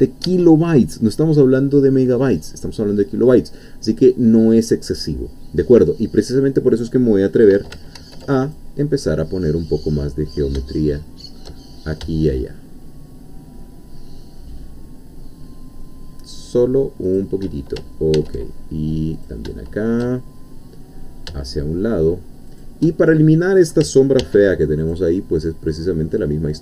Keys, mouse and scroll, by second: 0.2 Escape, 8.0 ctrl+r, 8.4 ctrl+click, 17.1 shift+click, 18.1 ctrl+r, 19.1 click, 22.5 shift+click, 24.2 ctrl+r, 24.8 ctrl+click.